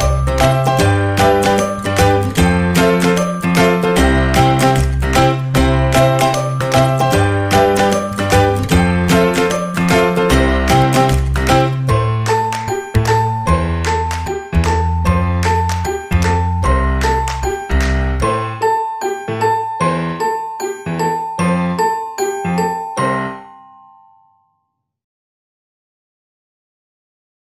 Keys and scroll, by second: 1.5 space.